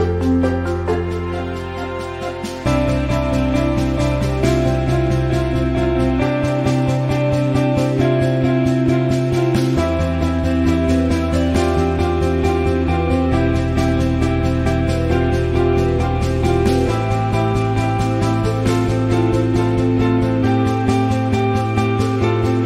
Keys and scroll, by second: 6.7 Down, 6.8 Down.